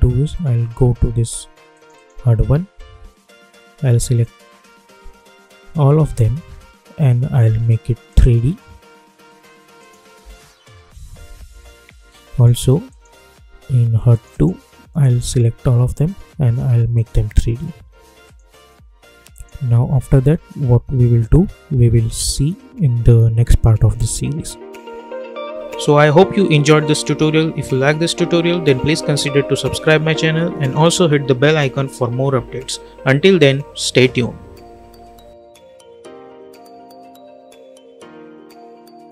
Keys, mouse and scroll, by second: 6.0 ctrl+a, 8.0 click, 10.1 space, 12.8 click, 15.5 ctrl+a, 16.9 click, 20.1 space.